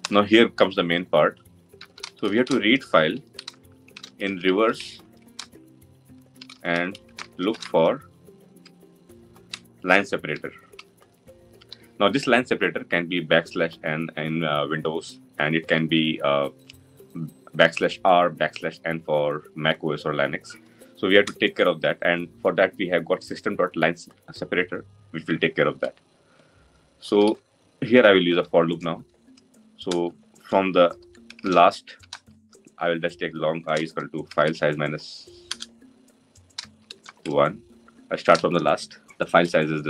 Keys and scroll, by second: 29.7 Return, 35.1 Return.